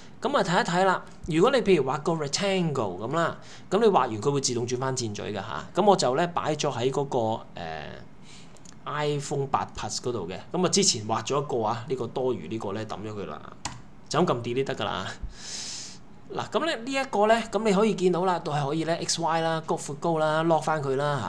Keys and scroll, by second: 13.7 BackSpace.